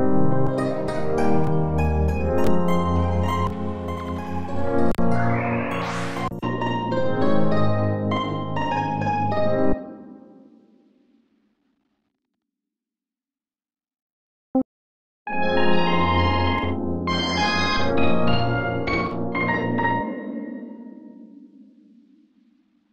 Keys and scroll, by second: 0.3 Return, 1.3 Return, 2.2 Return, 3.3 Return, 4.5 Return, 6.0 Return, 8.8 q, 10.8 q, 16.2 Return, 17.4 Return, 18.8 Return, 20.6 q, 21.8 q.